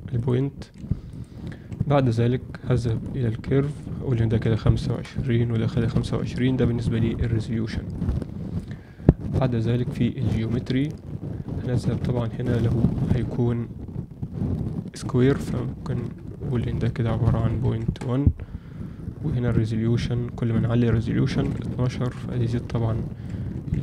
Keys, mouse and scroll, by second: 0.1 click, 0.5 s, 1.6 Tab, 3.0 click, 3.8-6.3 drag, 7.9 click, 10.6 click, 12.3-18.7 drag, 19.7-22.2 drag, 22.8-23.2 ctrl+alt+middle drag, 23.5 Tab.